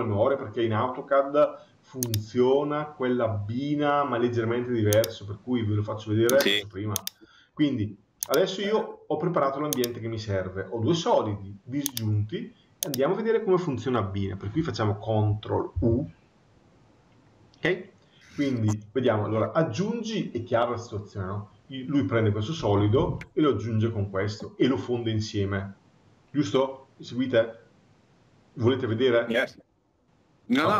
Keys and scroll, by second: 15.5 ctrl+u.